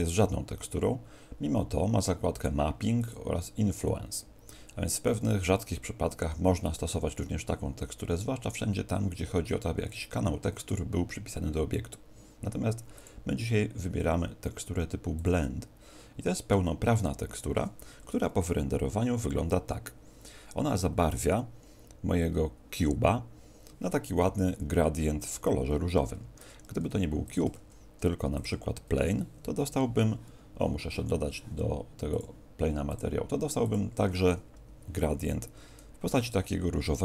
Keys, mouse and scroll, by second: 2.3 click, 2.9 click, 12.9 click, 26.1 Escape, 27.0 x, 27.6 shift+a, 31.1 F12, 31.1 Escape, 32.1 click, 32.9 click.